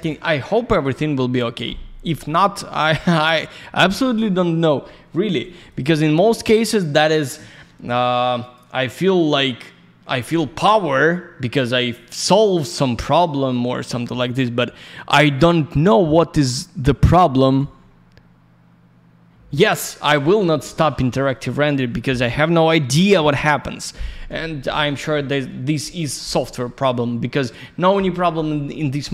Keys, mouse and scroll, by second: 4.1 click, 4.3 click, 5.6 click, 5.7 click, 6.2 click, 6.3 click, 8.4 click, 12.2 right click, 15.2 click, 20.3 click, 20.4 click.